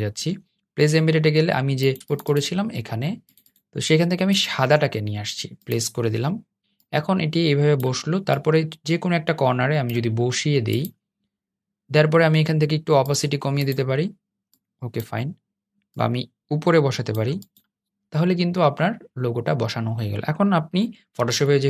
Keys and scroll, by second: 20.9 super+s.